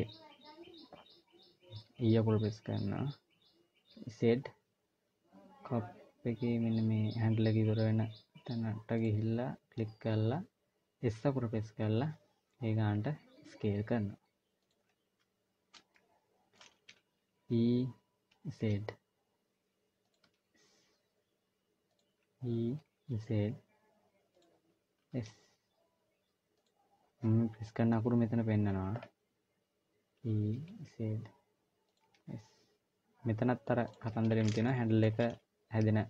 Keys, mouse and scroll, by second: 1.8 e, 15.7 shift+middle click, 17.2 e, 20.0 s, 21.9 e, 24.8 s, 29.8 e, 31.8 s, 34.4 shift+middle click.